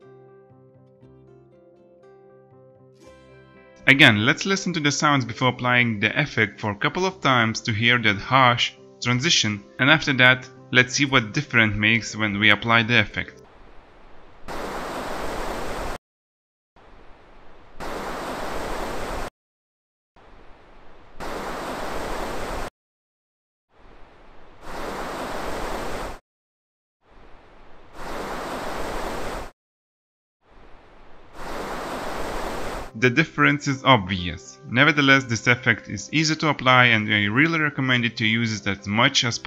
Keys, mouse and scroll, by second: 2.3 ctrl+shift+d.